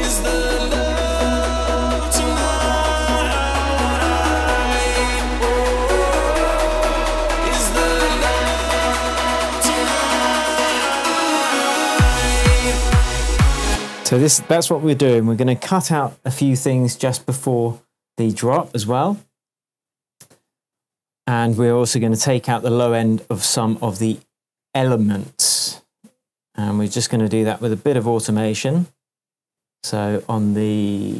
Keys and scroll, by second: 13.6 space.